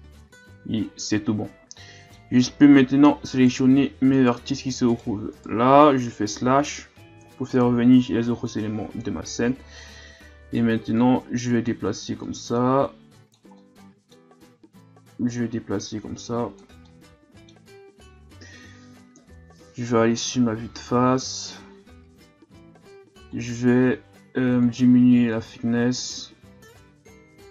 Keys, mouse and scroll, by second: 1.0-2.4 middle drag, 2.4 Tab, 2.8 middle click, 3.3 right click, 4.1 shift+right click, 4.9 shift+right click, 5.4 shift+right click, 7.2 KP_Divide, 8.3 KP_3, 9.9 scroll up 2, 11.0-13.6 drag, 13.6-14.9 middle drag, 14.9-16.9 drag, 16.9-19.2 middle drag, 19.2 KP_1, 20.0-20.6 ctrl+scroll up 1, 20.6 scroll up 1, 23.3-27.5 drag.